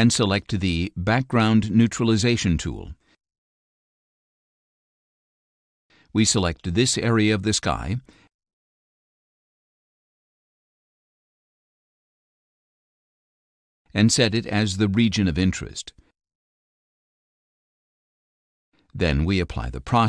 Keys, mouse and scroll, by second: 1.1 click, 4.4 click, 6.7-8.7 drag, 10.9 click, 12.1-13.1 drag, 14.0-16.3 drag, 19.6-20.0 drag.